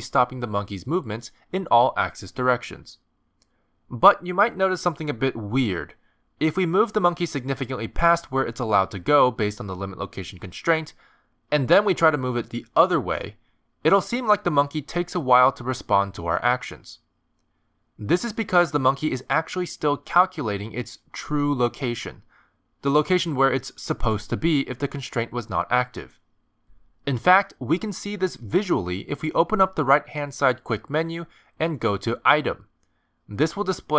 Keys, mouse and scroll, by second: 0.6 middle click, 1.3 g, 2.7 middle click, 3.4 g, 5.8 middle click, 7.7 g, 12.5 middle click, 13.1 g, 29.3 middle click, 30.8 click, 32.2 click.